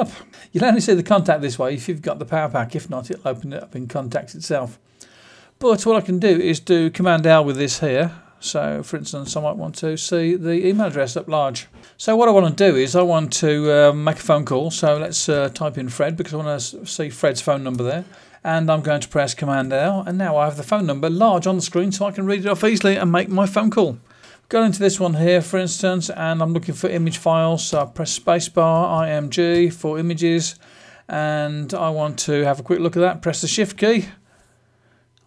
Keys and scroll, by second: 9.1 super+l, 11.7 super+space, 14.7-15.7 typing, 17.6 Return, 19.5 super+l, 29.1-29.9 typing.